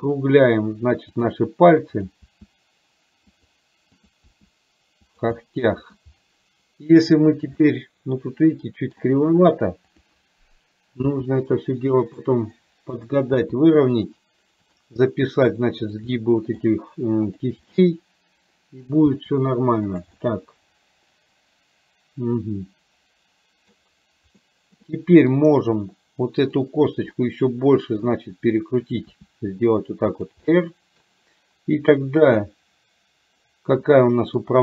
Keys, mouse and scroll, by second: 4.3 r, 5.4 middle click, 7.7-9.0 middle drag, 9.9 click, 11.2 r, 13.2 click, 13.4 r, 16.3 middle click, 17.5 click, 17.8-18.9 middle drag, 19.2 r, 20.3-23.8 middle drag, 24.5 middle click, 26.5 click, 27.3 middle click, 29.3 r, 30.5 middle click, 34.0 middle click.